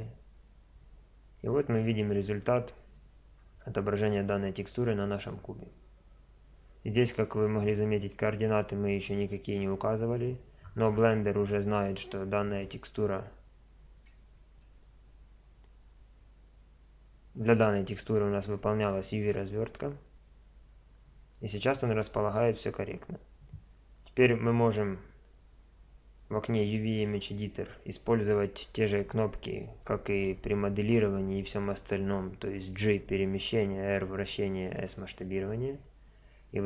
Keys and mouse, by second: 1.8 middle click, 2.0 click, 3.0-10.6 middle drag, 14.6 Tab.